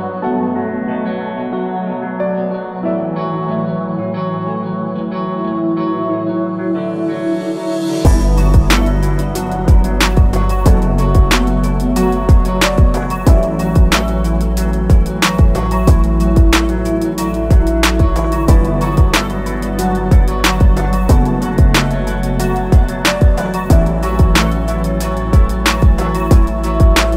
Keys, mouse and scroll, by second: 1.3 click, 3.3 Escape, 5.7 Escape, 6.9 scroll down 1, 9.8 click, 14.9 Escape, 15.2 click, 22.7 Escape, 24.5 click.